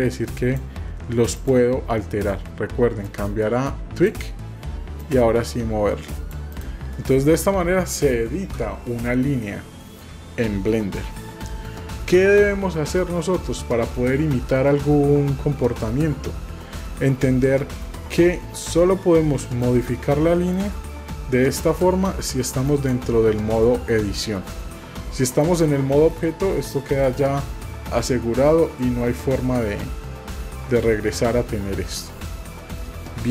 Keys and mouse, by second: 1.4 click, 3.0-4.1 drag, 5.0-6.3 drag, 6.5 click, 9.5 shift+middle click, 18.6-19.6 drag, 20.6-21.9 drag, 22.6-25.6 drag, 32.6 middle click.